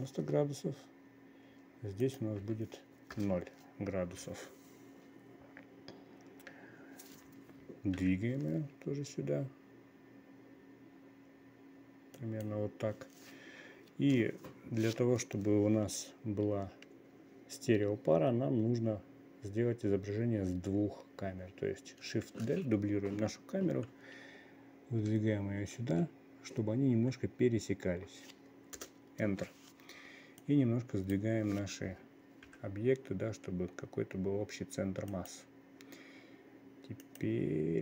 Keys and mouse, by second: 2.6-3.7 drag, 8.5 g, 22.8 shift+d, 30.9-35.6 drag, 33.0 g, 37.5 click.